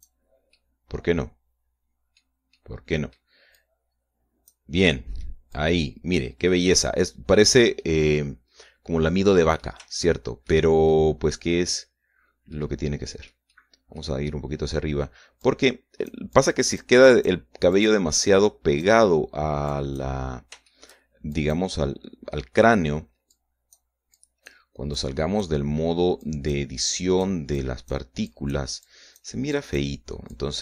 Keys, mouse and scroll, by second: 0.4 click, 1.4-3.3 middle drag, 3.4 click, 4.5-5.6 drag, 5.7 middle click, 6.4 click, 7.4-8.6 middle drag, 10.9 shift+middle click, 11.8-14.4 shift+middle drag, 15.2-15.5 scroll up 1, 16.3 click, 17.3 click, 17.9 click, 18.6 click, 19.1 click, 20.6 click, 21.6 shift+middle click, 22.2 shift+click, 23.3 scroll down 1, 24.2 click, 25.1 click, 25.9 click, 27.1 click, 27.8 click, 28.5 click, 29.2 click, 29.7 click, 30.5 click.